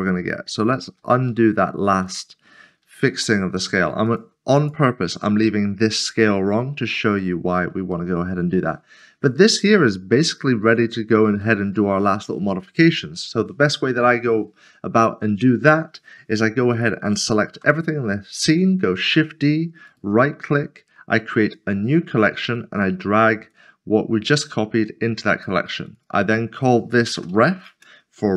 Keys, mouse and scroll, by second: 0.1 middle click, 0.8 ctrl+z, 2.5 ctrl+s, 7.2 middle click, 8.1 shift+middle click, 9.2 middle click, 11.4 shift+middle click, 14.9 scroll down 1, 17.5 typing, 19.0 typing, 19.9 right click, 22.7 click, 25.3 click, 26.0 double click, 27.2 typing, 27.7 Return.